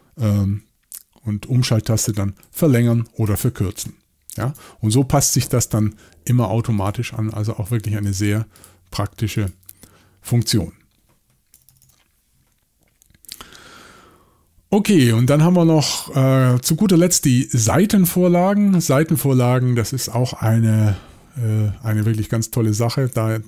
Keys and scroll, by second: 1.6 alt+shift+Right, 2.4 alt+shift+Left, 2.6 alt+shift+Left, 2.8 alt+shift+Left, 3.3 alt+shift+Right, 3.5 alt+shift+Right, 11.6 typing.